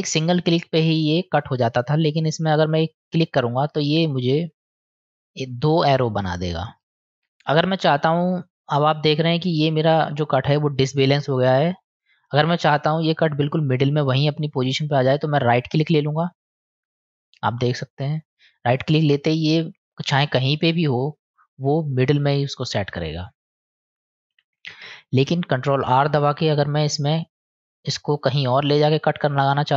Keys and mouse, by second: 17.8-19.3 drag, 24.6 ctrl+z, 26.1 ctrl+r.